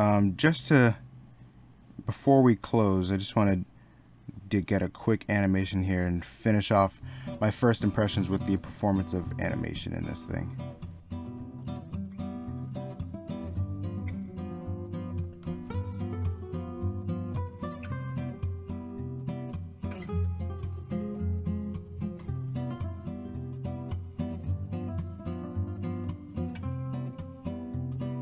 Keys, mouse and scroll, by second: 7.3 middle click, 11.3 e, 13.3 i, 14.9 e, 15.6 e, 18.4 e, 18.7 ctrl+z, 21.2 e, 22.2 e, 25.8-28.2 typing.